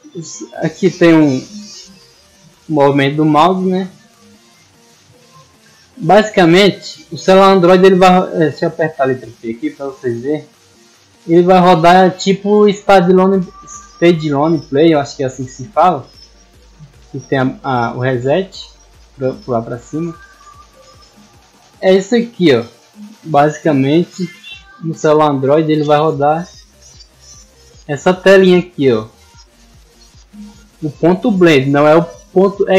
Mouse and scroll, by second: 0.6 middle click, 3.5 middle click, 5.0-6.4 drag, 7.1 scroll up 1, 11.5 click, 12.0 click, 13.3 click, 14.5 click, 15.6 click, 17.2 click, 17.6 click, 19.2 click, 19.8 click, 20.0 click, 20.2 click, 25.5 click, 27.6 click.